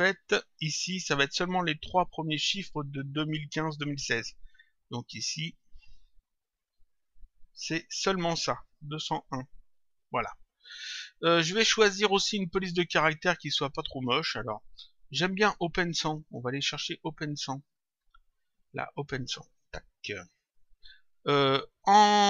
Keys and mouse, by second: 5.2 click, 9.3 click, 11.8 click, 14.0 click, 15.9 click, 19.5 click.